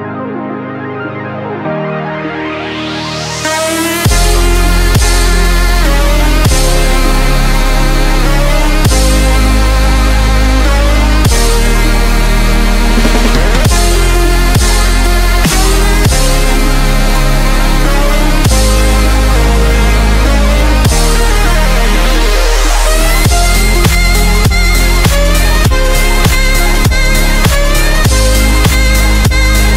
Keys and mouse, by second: 0.1 click, 1.2 ctrl+t, 2.7 Return, 4.6 click, 6.4 ctrl+j, 8.0-10.0 drag, 10.0 ctrl+t, 10.6-15.9 drag, 11.0 typing, 15.9 Return, 16.6 click, 17.4 ctrl+t, 18.7-24.2 shift+drag, 24.2 Return, 26.2-29.7 drag.